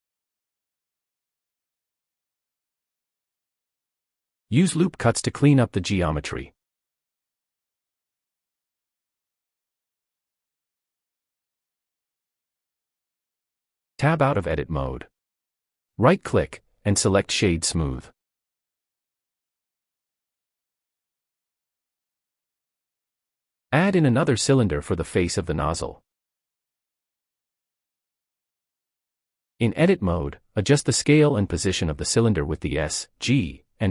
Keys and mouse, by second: 0.3-1.8 middle drag, 2.8 middle click, 3.0 click, 5.6 click, 8.2 click, 10.8 click, 13.1 Tab, 13.7-14.0 middle drag, 14.8 click, 15.4 right click, 15.9 click, 16.7-19.3 middle drag, 20.0-22.1 drag, 24.1-24.5 shift+middle drag, 25.8 shift+a, 29.2 Tab, 29.9-31.7 typing, 31.4 Return, 33.6 click.